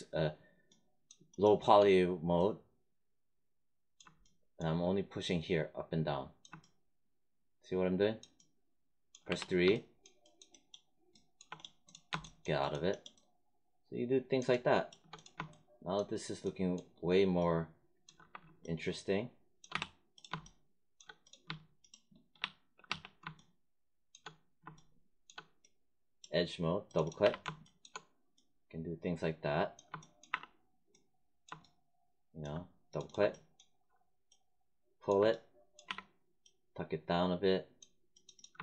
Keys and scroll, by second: 9.2 3, 18.1 1, 19.6 3, 22.3 1, 22.8 3, 27.2 w, 30.2 r, 35.8 w.